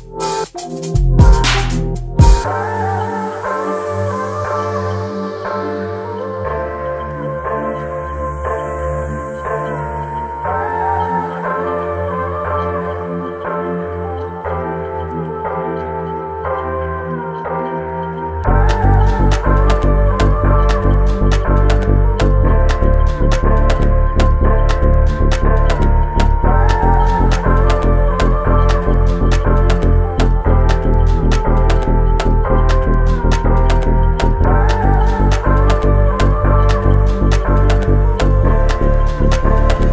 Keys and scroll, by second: 2.3 space, 7.4 s, 11.9 space, 15.8 h, 16.8 space, 18.2 q, 20.8 space, 22.9 m, 35.0 s, 35.4 space, 36.1 m, 37.9 h.